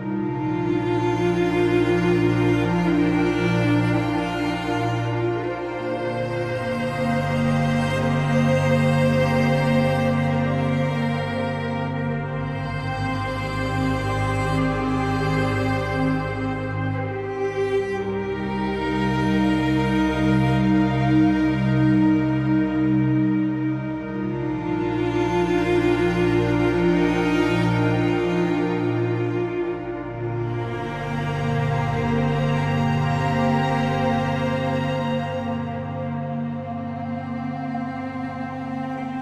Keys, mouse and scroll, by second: 2.2 shift+a, 4.6-5.8 drag, 6.7 click, 8.0 click, 12.1 shift+a, 15.2-19.3 drag, 20.4 click, 22.4 click, 22.7 shift+d, 26.3 shift+d, 29.1 click, 29.9 click, 31.6 click, 32.4 click, 33.3-39.1 drag, 39.1 shift+d.